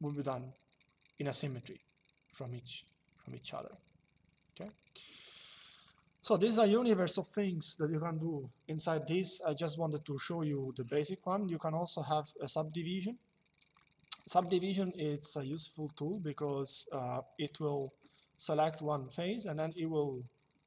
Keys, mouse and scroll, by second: 4.3 click, 5.6 click, 13.5 click, 15.2 click, 17.1 click, 19.4 click.